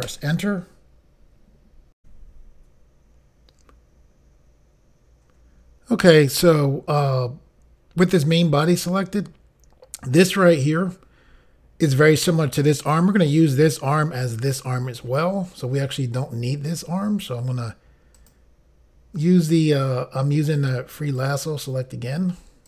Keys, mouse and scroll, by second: 0.0 Return, 2.0 Pause, 16.7 click, 18.2 click, 19.5 click, 20.6 click, 20.7 click, 21.2 click.